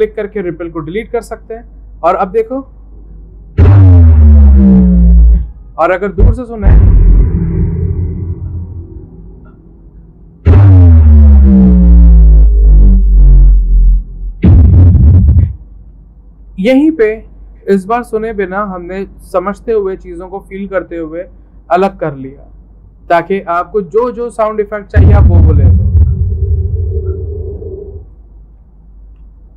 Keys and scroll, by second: 19.4 v.